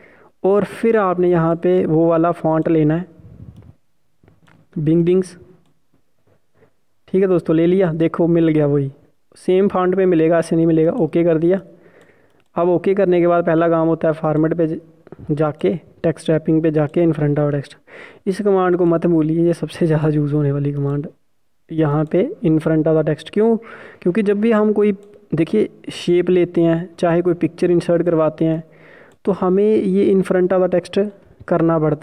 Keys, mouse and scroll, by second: 11.6 click, 25.2 click, 31.9 Delete.